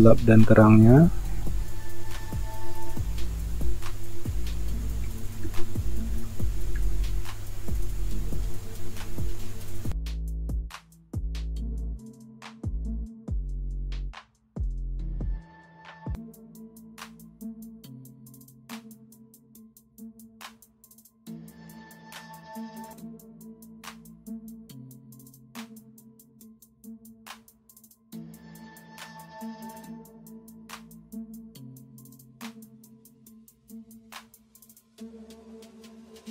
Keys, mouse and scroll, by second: 5.1-7.1 typing, 10.6-11.7 typing, 13.2-15.3 typing, 17.3 space, 18.7 space, 20.2 ctrl+alt+z, 26.5 ctrl+space, 27.6 alt+Delete, 29.0-29.3 typing, 30.8 typing, 33.7 typing, 34.9 ctrl+d, 36.1 typing.